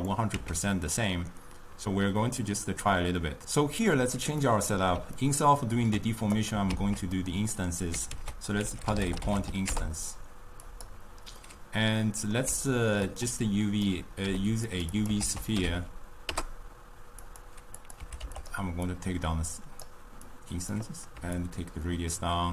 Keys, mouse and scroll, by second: 0.0 click, 0.8 x, 4.5-6.4 middle drag, 6.4 click, 6.7 ctrl+x, 7.5-8.4 middle drag, 8.4 ctrl+a, 11.7-13.5 middle drag, 13.5 click, 14.2 g, 15.0 click, 15.3 ctrl+a, 17.9-18.8 drag, 19.2-22.5 drag.